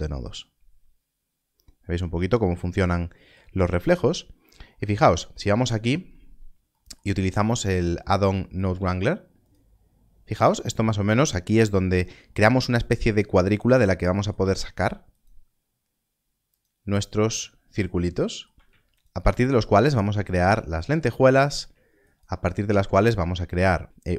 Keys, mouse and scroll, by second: 4.4 scroll up 1, 7.2 scroll down 1, 9.0 ctrl+s, 16.5 ctrl+shift+click, 19.0 ctrl+shift+click.